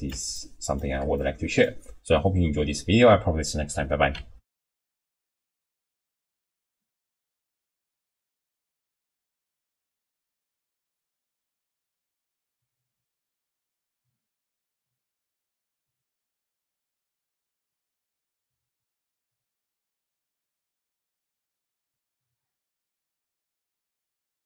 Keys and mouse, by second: 0.4 shift+click, 1.3 click, 4.5 ctrl+alt+shift+w.